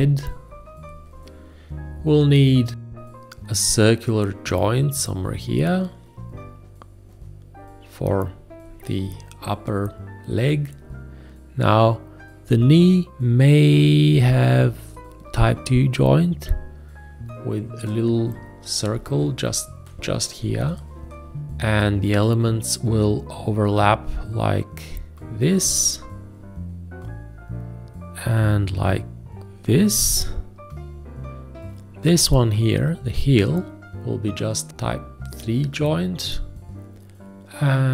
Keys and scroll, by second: 19.4 Left, 20.0 Down.